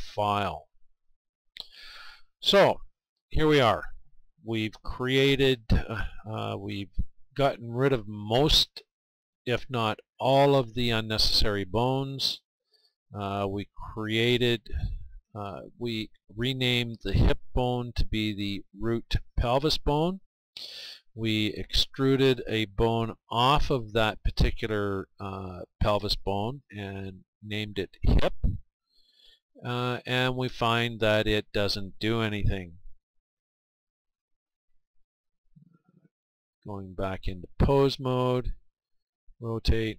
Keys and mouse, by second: 3.6-12.6 middle drag, 17.0-22.2 right drag, 27.9-29.8 right drag, 29.6-34.5 middle drag, 34.5-36.2 right drag, 36.3 r, 36.4-38.8 drag, 38.8 r.